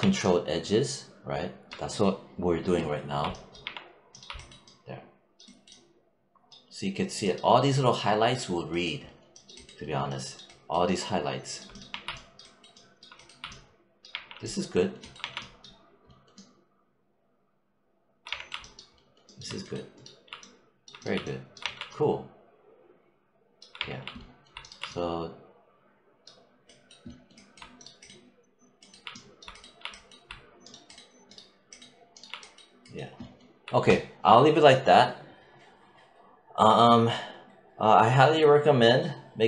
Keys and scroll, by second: 3.5 3, 11.7 1, 13.9 3, 15.0 1, 18.1 3, 21.4 1, 23.6 3.